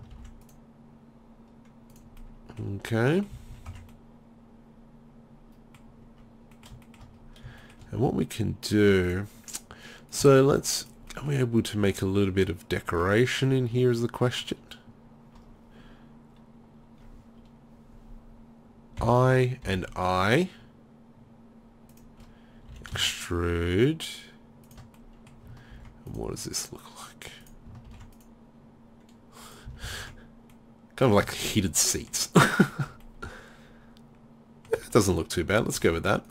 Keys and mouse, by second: 0.1 ctrl+r, 2.0 click, 3.3 z, 3.5 z, 3.7 Tab, 6.1 Tab, 6.1 middle click, 8.8-10.7 drag, 11.1-13.0 middle drag, 19.0 i, 22.0 click, 22.7-24.7 drag, 22.7 e, 24.7-25.8 drag, 25.8 ctrl+r, 27.4 click, 27.9 ctrl+r, 29.7 z, 29.9 z, 30.0 Tab.